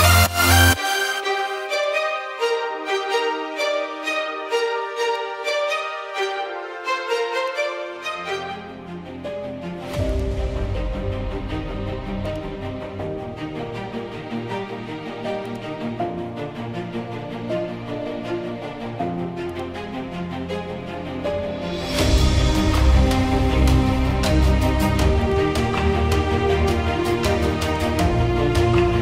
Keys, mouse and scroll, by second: 0.7 click, 0.8 click, 3.5 [, 3.8 [, 4.0 [, 4.2 [, 6.9 click, 10.5 click, 11.5-12.5 scroll, 13.6 click, 13.9-14.2 scroll, 16.5 click, 18.5 click, 22.6 click, 25.7 click, 28.9 click.